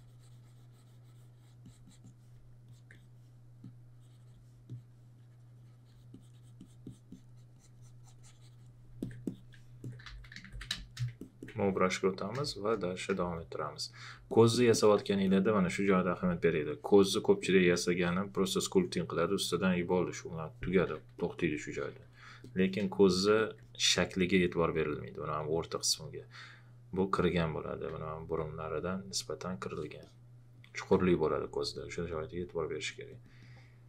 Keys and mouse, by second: 1.6 click, 9.8-11.0 typing, 11.1 click, 12.4 space, 13.1 space, 14.1 click, 22.8 space, 22.9 click, 28.0 alt+click, 31.4 click.